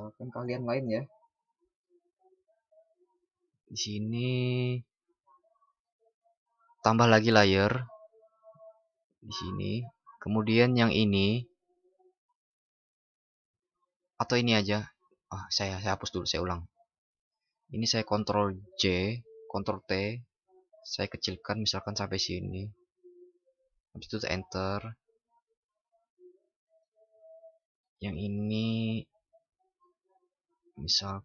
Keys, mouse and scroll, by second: 8.0 click, 18.5 ctrl+shift+i.